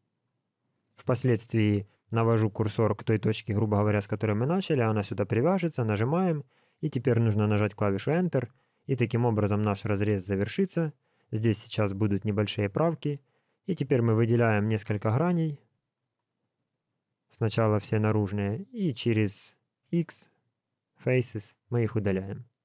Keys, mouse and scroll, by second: 13.6 click, 14.8 click, 15.9 shift+click, 19.8 x.